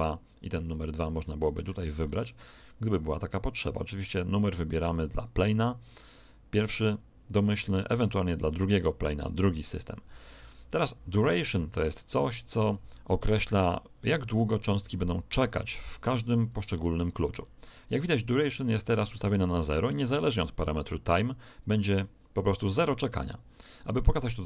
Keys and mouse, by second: 0.6 click, 2.5-3.9 middle drag, 4.3 click, 8.5 click, 16.3-18.7 drag.